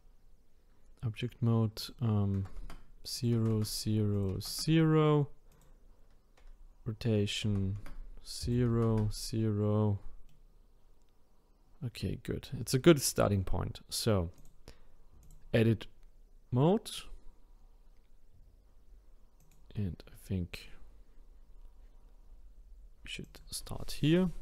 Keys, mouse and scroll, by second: 10.3-13.3 middle drag, 14.4-17.4 drag, 19.4 click, 23.2-24.4 drag.